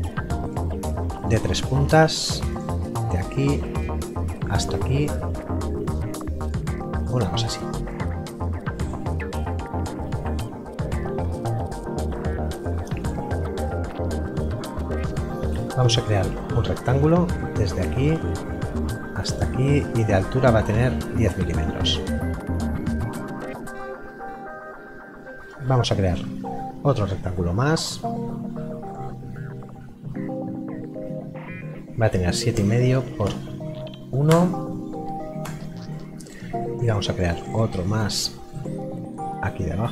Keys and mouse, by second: 11.3 Escape, 12.1 click, 16.0 click, 21.1 KP_0, 25.4 click, 28.8 click, 32.5 Tab, 33.2 KP_1, 34.3 Return, 39.1 click.